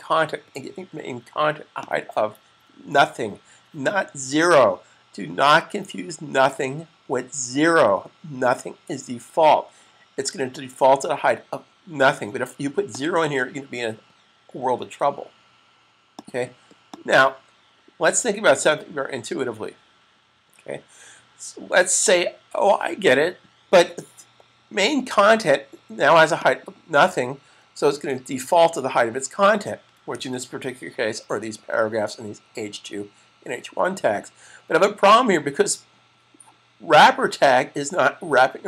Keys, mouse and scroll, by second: 1.6 click, 12.8 click, 16.0 click, 26.2 click, 29.9 super+s.